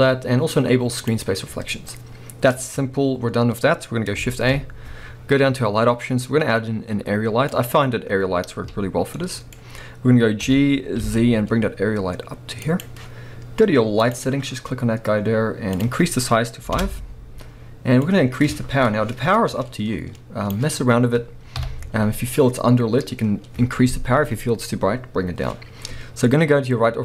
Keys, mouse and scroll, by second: 1.0 click, 4.3 shift+a, 8.2-9.2 scroll down 1, 9.2-12.8 middle drag, 9.5-10.1 scroll down 1, 10.4 g, 12.8 click, 14.0 click, 15.8-27.0 drag, 16.8 Return, 21.6 KP_3.